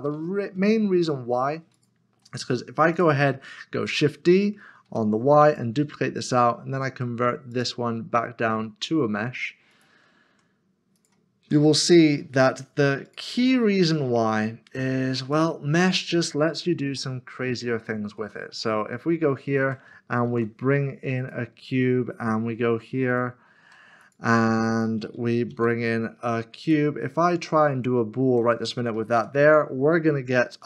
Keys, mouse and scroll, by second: 0.1 ctrl+z, 1.1 ctrl+z, 1.7 click, 2.1-2.9 scroll down 1, 4.9 typing, 5.5 click, 9.7 click, 10.3 Tab, 11.0 click, 11.4 Tab, 11.8 click, 15.3 click, 17.0 middle click, 18.2 shift+middle click, 19.5 shift+r, 21.2 a, 23.1 shift+click, 24.0 shift+click, 25.7 a, 26.6 click, 29.2 ctrl+shift+KP_Subtract, 30.5 click.